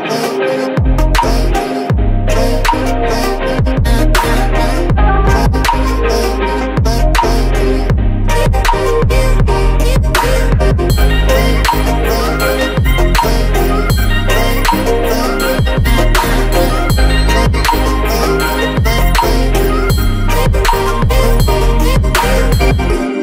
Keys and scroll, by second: 5.9 Return, 6.0 Left, 10.4 Down, 13.0 space, 15.2 ctrl+g, 18.9 Return, 19.6 space.